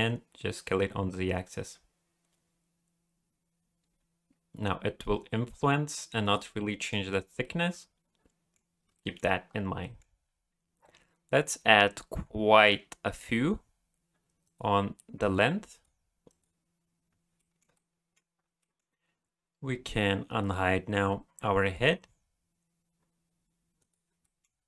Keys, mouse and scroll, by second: 6.6 middle click, 7.4 middle click, 8.7 scroll down 1, 8.9 shift+middle click, 9.4-9.8 scroll down 2, 9.8 middle click, 10.8-11.5 scroll down 3, 11.5-12.9 scroll up 7, 13.3-14.1 scroll down 1, 14.4 click, 15.2 click, 15.7 click, 16.3 click, 17.4 shift+middle click, 17.7 middle click, 18.6 middle click, 20.4 click, 21.6 click, 23.8 click, 24.2 middle click.